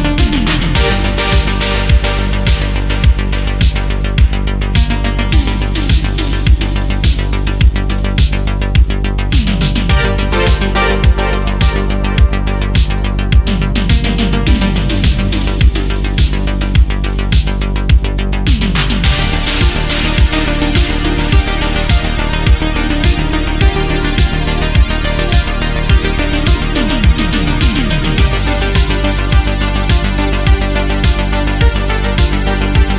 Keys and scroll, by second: 0.8 ctrl+z, 1.9 ctrl+z, 2.1 ctrl+z, 2.9 ctrl+z, 5.9 ctrl+z, 8.4 space, 12.8 ctrl+z, 17.5 space, 21.9 space, 24.1 space, 25.9 space, 29.9 space.